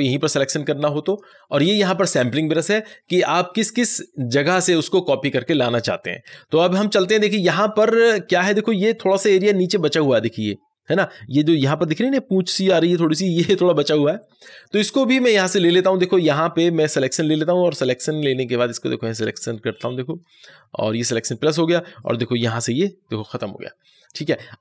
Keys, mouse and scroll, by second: 0.9 click, 1.9 click, 15.1-24.6 drag.